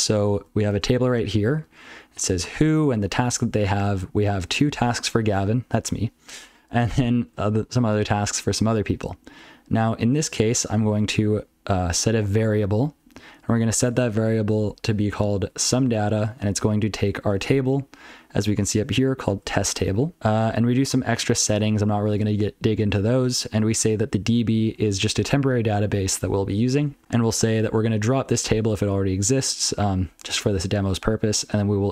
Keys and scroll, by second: 0.1 ctrl+n, 0.3 ctrl+n, 0.7 ctrl+space, 0.8 ctrl+n, 1.0 ctrl+n, 1.2 ctrl+n, 1.4 ctrl+g, 1.6 ctrl+p, 1.8 ctrl+f, 2.0 ctrl+p, 2.4 ctrl+alt+f, 2.6 ctrl+alt+f, 3.0 ctrl+n, 3.3 ctrl+n, 3.4 ctrl+n, 3.8 ctrl+p, 4.1 ctrl+a, 4.3 ctrl+space, 4.4 ctrl+n, 4.7 ctrl+n, 5.0 ctrl+g, 6.8 ctrl+space, 6.9 ctrl+n, 7.3 ctrl+n, 8.6 ctrl+g, 8.8 ctrl+n, 9.5 ctrl+p, 9.7 ctrl+p, 9.9 ctrl+n, 10.1 ctrl+n, 10.2 ctrl+n, 10.4 ctrl+n, 10.6 ctrl+n, 10.7 ctrl+n, 11.1 alt+f, 11.3 alt+f, 11.4 alt+f, 11.6 alt+f, 11.8 alt+f, 11.9 alt+f, 12.1 alt+f, 12.2 alt+f, 12.5 alt+f, 13.1 ctrl+alt+f, 13.9 ctrl+f, 15.2 alt+b, 15.4 alt+b, 15.8 alt+f, 16.5 ctrl+f, 16.7 ctrl+f, 18.0 ctrl+g, 18.2-18.5 ctrl+p, 18.9-19.2 ctrl+n, 19.7 ctrl+n, 19.7 ctrl+p, 19.9 ctrl+n, 20.1 ctrl+p, 22.0 ctrl+a, 22.5-23.0 ctrl+f, 23.6 ctrl+alt+f, 23.8 ctrl+alt+f, 24.2 ctrl+alt+f, 26.9 ctrl+n, 31.3 ctrl+n.